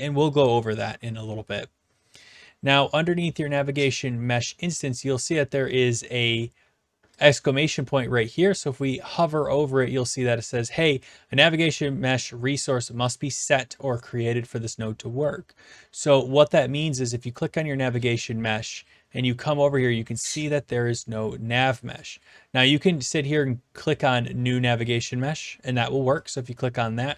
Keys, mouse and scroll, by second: 7.3 click, 17.2-18.3 drag, 22.1-23.1 drag, 26.2 click.